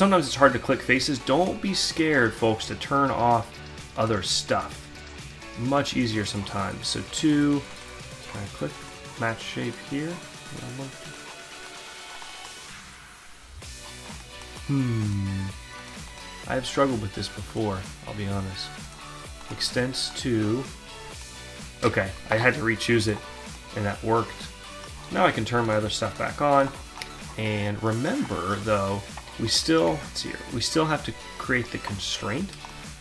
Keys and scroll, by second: 29.4 alt+Tab.